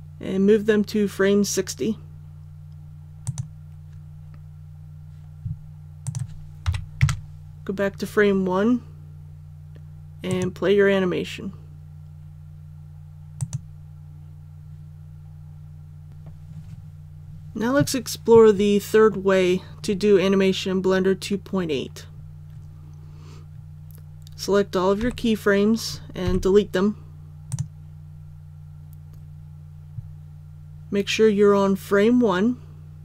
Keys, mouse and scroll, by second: 3.2 click, 6.6 KP_1, 10.2 click, 25.0 a, 26.2 x, 27.4 click.